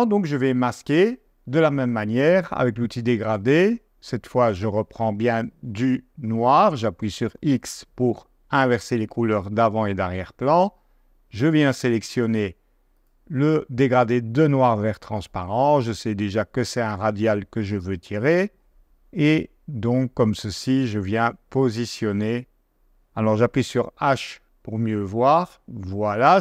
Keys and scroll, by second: 2.5 g, 23.6 h.